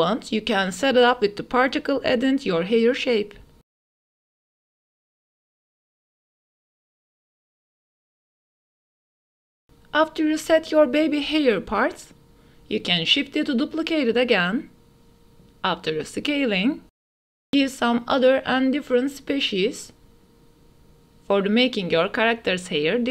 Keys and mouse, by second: 0.7-1.3 middle drag, 2.1-3.1 middle drag, 4.0 middle click, 4.5-8.3 drag, 8.4 ctrl+s, 8.8 click, 9.4 ctrl+s, 11.0 s, 11.2 z, 13.8 shift+d, 14.2 x, 15.6-18.2 typing, 17.8 click, 18.8 ctrl+s, 19.0 click, 20.1 click, 20.3 click, 20.9 ctrl+s, 21.2-23.1 drag.